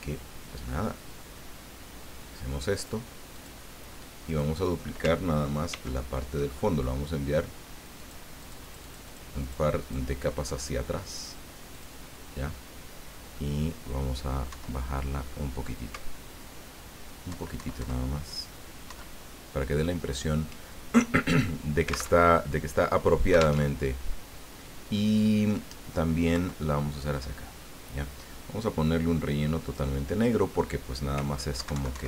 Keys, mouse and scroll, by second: 3.3 click, 4.3 click, 5.7 ctrl+d, 8.0 click, 8.4 click, 9.4 click, 9.8 click, 11.7 click, 14.5 Down, 17.3 alt+Down, 18.9 alt+Up, 22.3 alt+Tab, 23.6 alt+Tab, 26.3 Left, 29.6 click, 31.6 alt+Right.